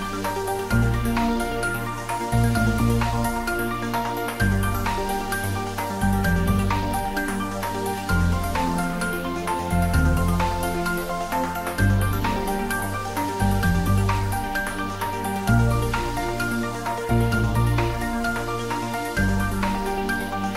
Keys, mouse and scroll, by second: 0.4 ctrl+s, 0.8 ctrl+middle click, 1.3 ctrl+middle click, 2.3 shift+middle click, 2.7 ctrl+middle click, 3.2 click, 3.7 ctrl+s, 11.8 ctrl+s, 12.0 shift+middle click, 12.7 ctrl+middle click, 13.1 ctrl+s, 13.4 shift+middle click, 14.4 ctrl+middle click, 14.9 ctrl+s, 15.5 shift+middle click, 16.0-18.0 shift+middle drag.